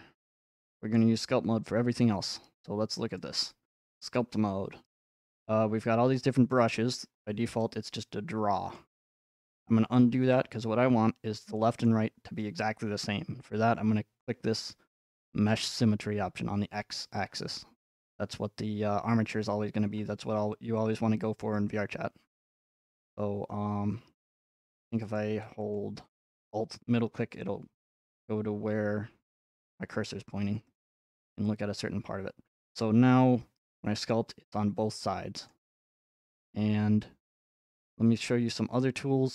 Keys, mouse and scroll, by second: 2.0-3.0 drag, 4.2 click, 4.2 scroll, 8.8 click, 11.0-13.3 scroll up 5, 14.7 click, 17.4 scroll up 2, 19.9 middle click, 20.6 middle click, 21.4 middle click, 21.7 middle click, 21.7 middle click, 23.0 scroll, 24.3 shift+middle click, 25.2 ctrl+scroll, 25.7 alt+middle click, 26.7-27.3 scroll up 4, 29.6-30.6 scroll, 30.7 alt+middle click, 31.3 scroll, 32.1-32.7 scroll, 34.1 click, 34.9 click, 35.5 middle click, 37.4 scroll up 2.